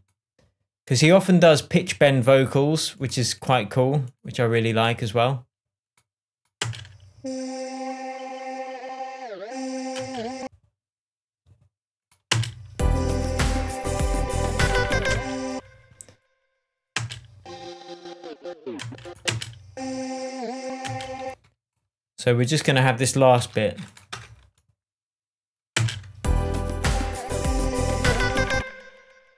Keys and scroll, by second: 7.0 space, 10.3 space, 12.7 space, 15.5 space, 17.3 space, 19.2 space, 21.2 space, 23.8 super+e, 24.5 super+BackSpace, 26.1 space, 28.5 space.